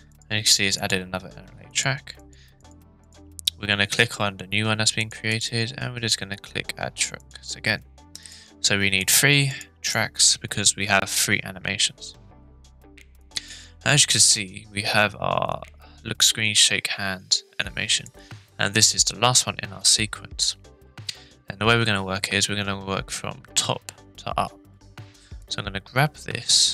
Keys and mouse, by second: 0.8 click, 1.8 click, 2.3 click, 2.6 click, 3.0 click, 5.3-7.3 drag, 8.2 click, 9.0 click, 9.5 click, 9.9 click, 13.2-18.0 drag, 25.5-26.7 drag.